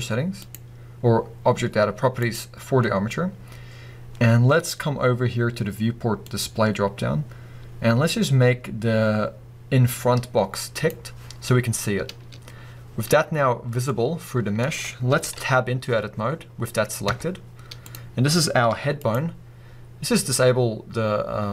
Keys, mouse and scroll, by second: 0.4 click, 2.2 click, 6.3-10.9 drag, 13.9-15.2 middle drag, 15.2 KP_1, 17.1 Tab, 17.9 click, 18.7 g, 19.1 right click.